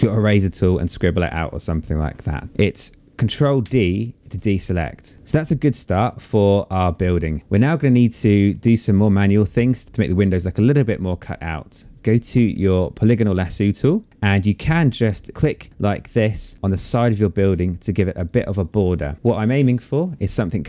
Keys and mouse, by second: 2.9 ctrl+d, 11.4 click, 13.4 click, 14.7 click, 16.2 click, 17.2 click, 18.6 BackSpace, 19.3 click.